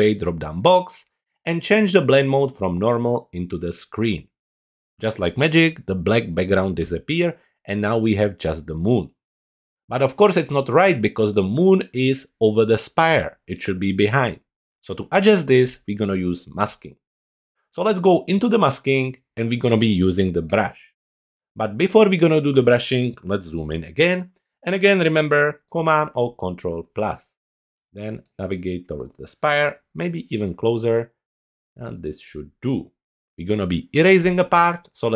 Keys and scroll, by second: 25.7 super+=, 27.5 super+space, 29.7 super+=.